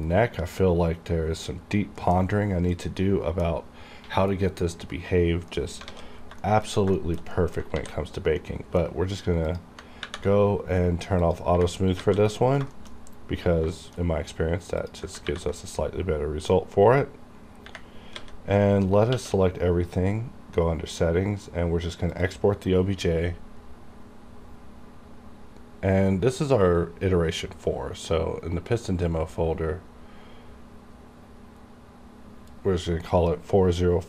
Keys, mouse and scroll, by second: 2.3 scroll down 1, 2.8-4.7 middle drag, 4.7-5.3 scroll down 1, 5.6 middle click, 6.0 alt+a, 6.2 scroll down 1, 6.5 shift+middle click, 7.0 shift+middle click, 7.4 middle click, 7.8 ctrl+s, 8.5 middle click, 9.5 click, 9.6 click, 10.1 ctrl+`, 11.3 click, 11.3 click, 12.1 alt+a, 12.8 middle click, 13.8 shift+middle click, 14.1-14.9 scroll down 1, 14.9 click, 15.3 ctrl+`, 18.2 a, 19.2 q, 22.2 click, 28.1 click, 32.6 click, 32.6-34.0 drag.